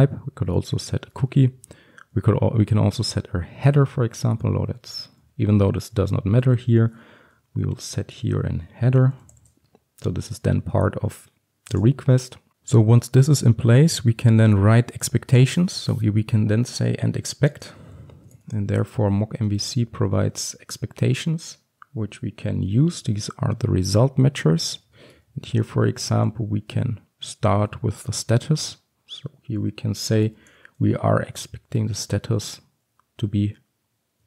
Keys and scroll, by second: 3.8 Return, 17.7 Return, 25.0 Return, 31.9 Return.